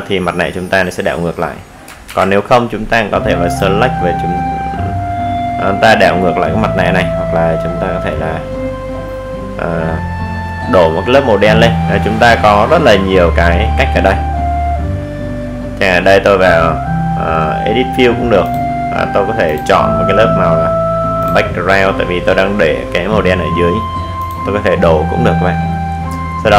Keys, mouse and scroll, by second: 4.5 click, 10.6 click, 13.6 click, 14.2 right click, 15.5 click, 17.2-17.6 scroll up 1, 19.2-26.5 drag.